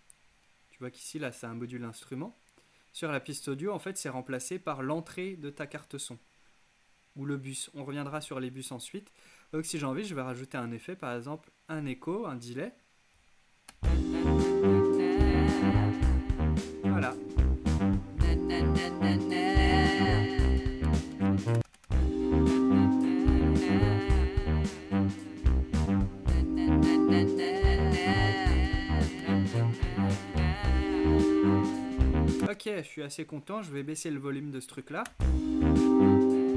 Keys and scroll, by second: 13.8 space, 21.6 space, 32.4 space, 35.1 space.